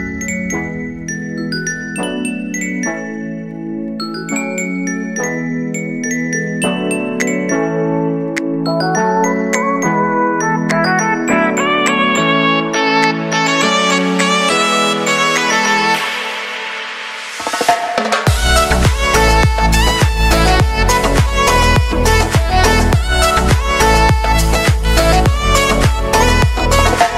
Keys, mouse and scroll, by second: 0.1 ctrl+d, 0.7-2.4 drag, 2.4 [, 2.8 space, 5.2 click, 5.6 space, 7.7 space, 8.7 click, 9.2 u, 10.0-10.5 scroll down 1, 11.3-13.6 drag, 13.6 F9, 15.4-21.8 drag, 23.2 space, 25.1 space, 25.4 click, 26.5 space.